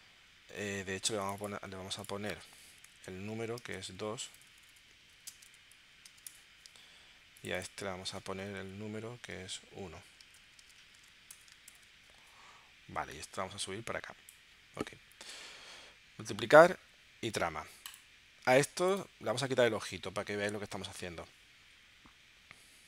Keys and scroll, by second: 2.7 Left, 3.4-6.1 typing, 6.3 Return, 8.6 Left, 9.4 1, 10.2 space, 11.4 Return, 11.6 shift+super+p.